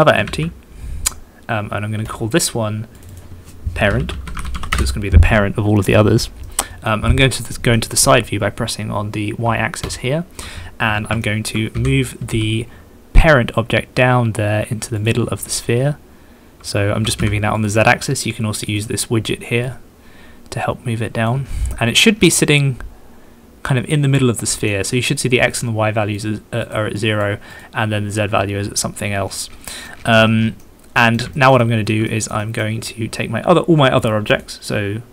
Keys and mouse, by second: 0.2 shift+a, 3.0 click, 3.1 click, 3.3 middle click, 4.3 middle click, 6.5-6.9 middle drag, 7.8 middle click, 11.2 shift+click, 11.8 g, 12.3 z, 17.0 g, 17.2 z, 17.6 click, 21.9 middle click, 22.6 middle click, 23.7-24.8 middle drag, 25.7-26.7 middle drag, 27.0 middle click, 29.9 middle click, 30.0 middle click, 30.8 middle click, 31.3 shift+middle click, 31.7 middle click, 32.1 shift+middle click, 32.6 middle click.